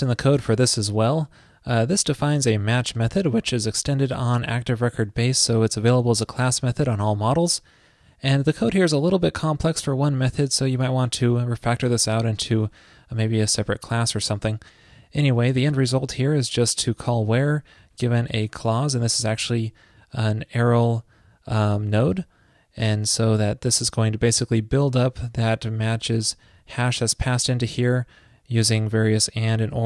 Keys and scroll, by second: 0.1 super+v.